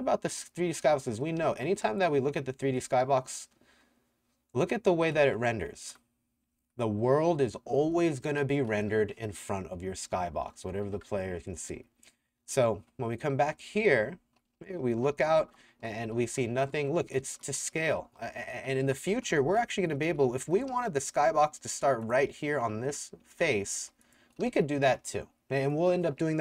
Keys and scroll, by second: 0.0-2.8 typing, 5.2 s, 5.8 w, 6.6 w, 8.4 w, 9.5-12.5 typing, 14.0-21.8 typing, 22.9 Escape, 23.3-25.4 typing.